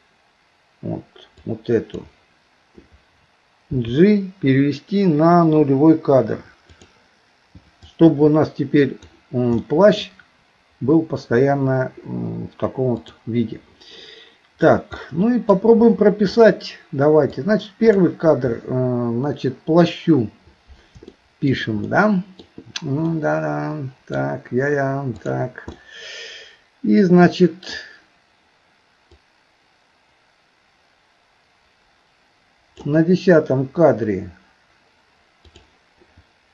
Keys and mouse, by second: 1.4 click, 3.7 g, 7.9-9.1 drag, 9.6 middle click, 13.0 click, 15.1 middle click, 17.4 click, 21.1 shift+middle click, 21.9 middle click, 23.1-24.2 middle drag, 25.1 click, 25.8-27.7 middle drag, 29.2-32.9 drag, 35.4 click.